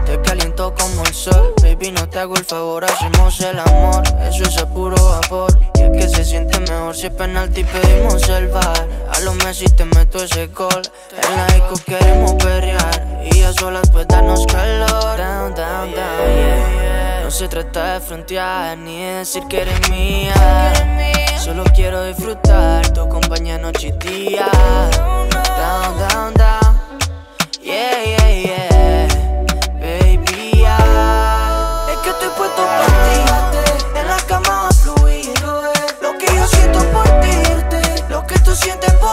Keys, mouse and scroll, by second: 1.8-2.4 scroll down 1, 2.4-3.0 middle click, 3.1-3.7 scroll up 1, 3.7-4.4 middle click, 4.8-5.2 scroll up 1, 5.2-5.9 middle click, 6.4-7.6 drag, 14.6-15.5 scroll down 1, 15.7-16.5 middle click, 16.8-18.4 drag, 18.6-19.1 middle click, 19.6-23.3 drag, 25.6-26.2 scroll up 1, 28.3-29.8 middle drag, 30.1-30.9 scroll down 1, 30.9-31.6 middle click, 31.6-32.5 scroll down 1, 32.5 click, 35.3-36.8 scroll up 1, 37.6 click.